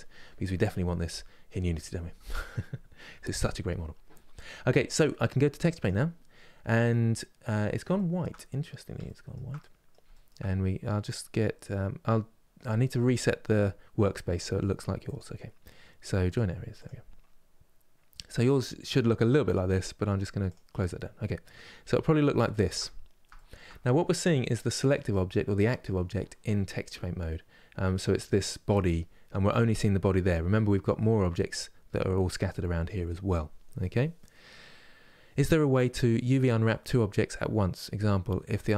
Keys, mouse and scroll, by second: 5.6 click, 6.6-8.1 middle drag, 8.1 scroll up 5, 8.8-16.0 shift+middle drag, 16.0-20.2 right drag, 20.2 click, 24.4-38.7 middle drag.